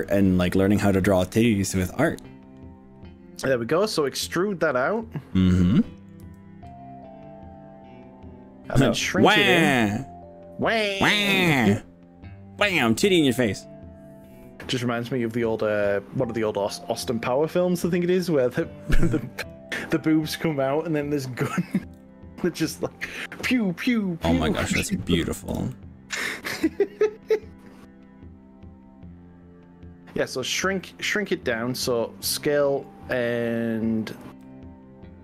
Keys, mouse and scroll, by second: 3.7 middle click, 4.6-6.2 middle drag, 6.3 e, 19.6 click, 19.7-21.4 middle drag, 21.8 ctrl+z, 22.0 middle click, 23.2 e, 25.6 click, 25.7-26.6 middle drag, 26.6-30.2 middle drag, 32.2 click, 32.4 middle click, 32.6 click, 34.2 s.